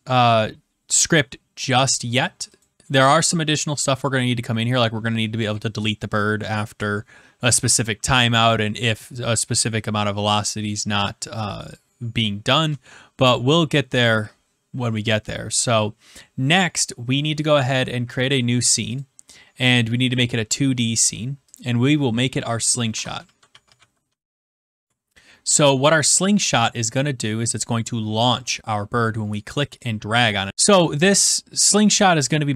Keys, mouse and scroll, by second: 30.5 click.